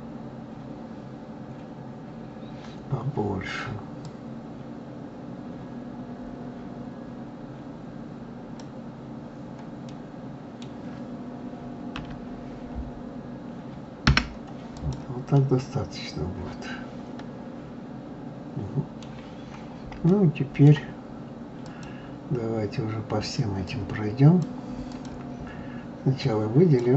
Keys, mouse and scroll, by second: 4.1-7.0 drag, 9.9-12.0 middle drag, 12.0 e, 14.7 click, 15.3-18.3 middle drag, 19.4-20.0 scroll up 3, 20.0 scroll up 1, 20.1-21.6 middle drag, 21.6 click, 23.7 click, 24.9 click, 25.5-26.2 scroll down 5, 26.2 click.